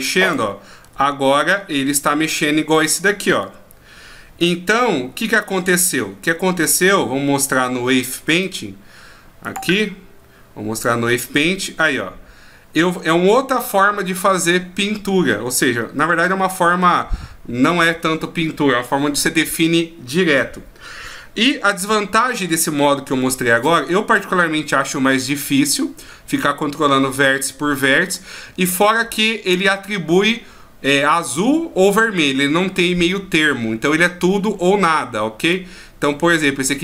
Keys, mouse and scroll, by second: 0.2 right click, 0.8 r, 2.7 right click, 3.4 r, 8.5 right click, 9.5 click, 10.8 click, 35.4 right click.